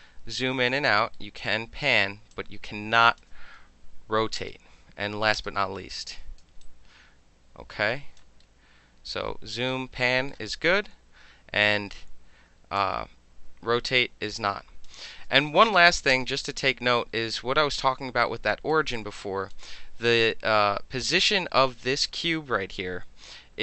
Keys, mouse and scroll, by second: 0.7 alt+middle click, 2.3 alt+click, 4.3 space, 5.3 space, 6.6-8.0 alt+drag, 8.0 alt+right click, 9.7-10.0 alt+drag, 10.3-11.6 alt+drag, 11.6-12.7 alt+middle drag, 12.7 alt+click, 14.9 alt+middle click, 15.4 alt+middle drag, 16.1 space, 18.2 alt+right click, 18.9 alt+click.